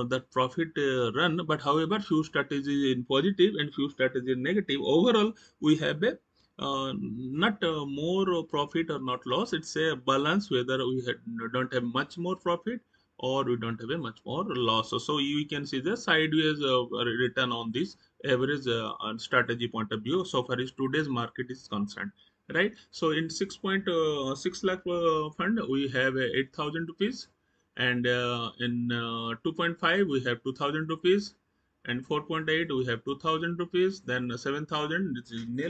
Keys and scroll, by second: 27.0 Right, 30.7 Right, 33.2 Right.